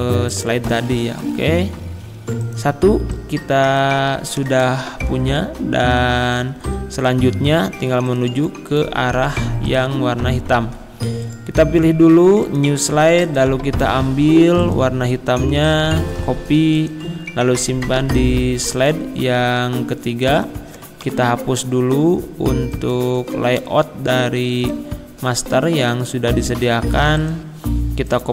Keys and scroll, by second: 5.2 Left, 6.1 Right, 6.6 Down, 16.1 ctrl+c, 18.0 ctrl+v, 21.1 Delete, 23.6 Delete.